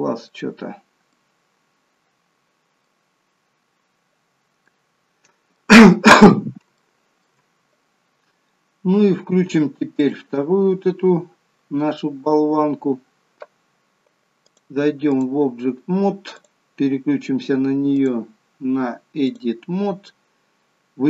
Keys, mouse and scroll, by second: 0.2 middle click, 0.6-1.0 scroll up 3, 1.0 middle click, 3.9-4.6 scroll down 3, 4.6 middle click, 5.6-6.6 scroll down 2, 6.7 shift+middle click, 9.9 click, 14.4 click, 16.2 click, 17.8 click.